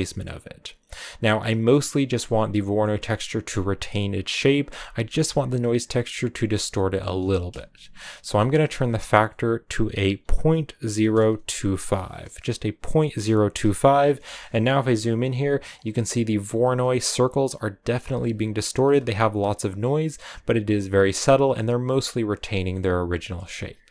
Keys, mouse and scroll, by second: 1.9-13.0 drag, 14.3-19.5 ctrl+middle drag, 20.8-22.6 scroll down 3, 22.6-23.9 middle drag.